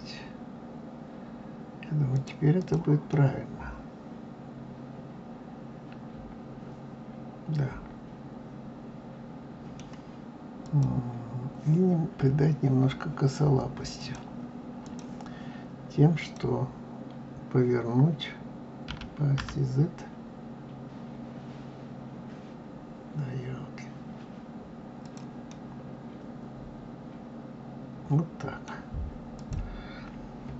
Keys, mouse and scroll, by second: 2.5 click, 3.0-6.1 middle drag, 10.6 click, 13.9-16.3 drag, 18.8 r, 25.4-28.5 middle drag, 29.3 click.